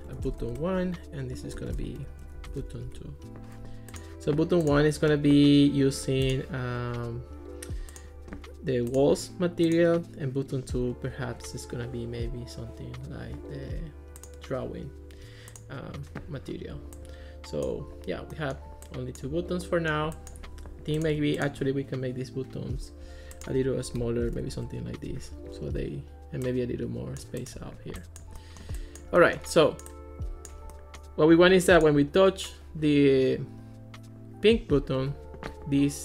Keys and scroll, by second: 0.0-3.2 typing, 24.3 1, 24.6 Return.